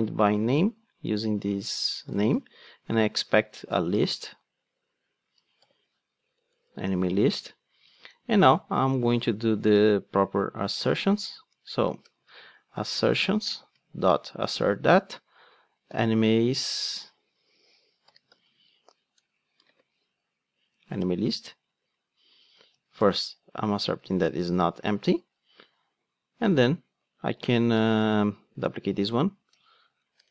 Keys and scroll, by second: 0.4 Return, 3.3 alt+Return, 9.6 super+x, 11.5 Tab, 14.5 Return, 20.0 ctrl+space, 28.9 super+d.